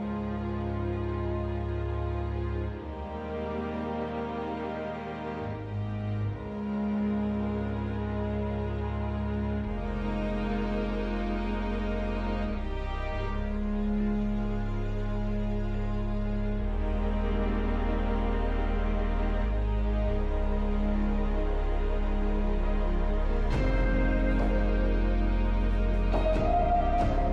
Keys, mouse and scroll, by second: 12.1 scroll down 1, 12.8-13.4 scroll down 1, 13.4-14.4 scroll up 1, 14.4-15.5 scroll down 3, 15.5-15.9 scroll up 1, 16.8 scroll down 1, 17.6-18.2 scroll down 2, 18.2-18.8 scroll down 1, 18.8-19.4 scroll down 1, 19.4-20.0 scroll down 1, 20.0-20.7 scroll down 2, 25.2-26.1 scroll down 1, 26.1-26.6 scroll down 1.